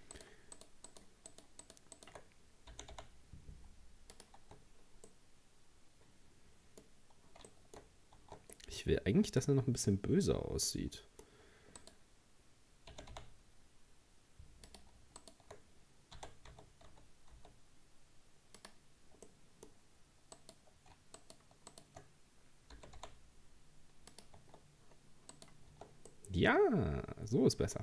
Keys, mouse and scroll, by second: 0.1 shift+right click, 0.6 shift+right click, 0.9 shift+right click, 1.3 shift+right click, 1.6 shift+right click, 2.0 shift+right click, 2.7 g, 4.4 Tab, 4.6-5.1 scroll down 4, 5.1-7.8 middle drag, 7.8-8.2 scroll up 2, 8.2 Tab, 8.5-11.8 middle drag, 11.8 right click, 12.9 g, 15.2 shift+right click, 16.2 r, 19.3-20.4 middle drag, 20.4 right click, 21.2 shift+right click, 21.7 shift+right click, 22.8 g, 24.8-25.3 scroll down 3, 25.3 right click, 25.7 Tab, 26.1-27.8 middle drag.